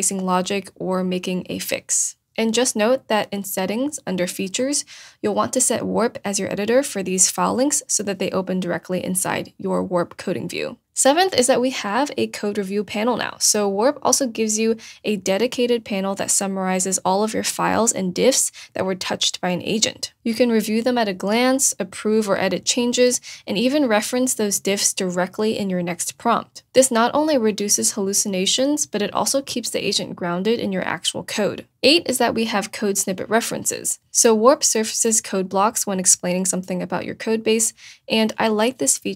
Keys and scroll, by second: 25.3 shift+;, 25.9 shift+Return.